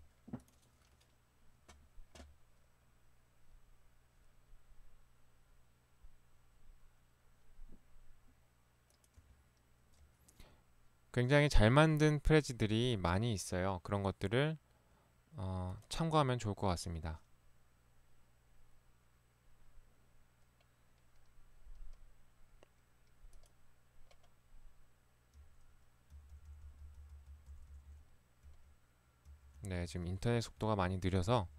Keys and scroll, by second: 25.4 Right, 26.3 Left, 26.5 Left, 29.3 Left, 29.6 Left.